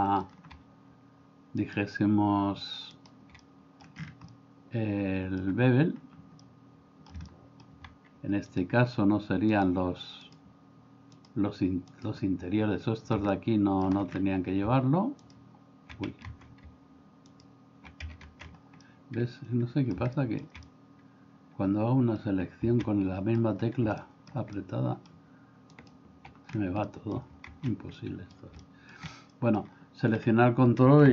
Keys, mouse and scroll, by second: 3.5 middle click, 4.4-5.4 middle drag, 6.5 middle click, 7.3 shift+middle click, 13.4 middle click, 16.3 ctrl+z, 18.5 ctrl+z, 18.9-20.0 middle drag, 20.2 shift+middle click, 20.7-22.2 middle drag, 22.9 middle click, 24.0 middle click, 24.6 middle click, 26.9 middle click, 27.6 ctrl+z, 28.0 middle click, 28.6 shift+middle click, 29.2 middle click.